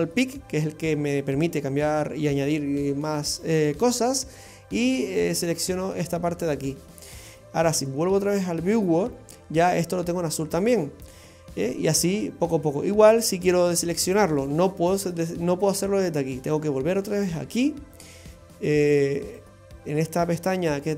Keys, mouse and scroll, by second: 3.8 click, 8.2 click, 17.2 click, 19.2 click.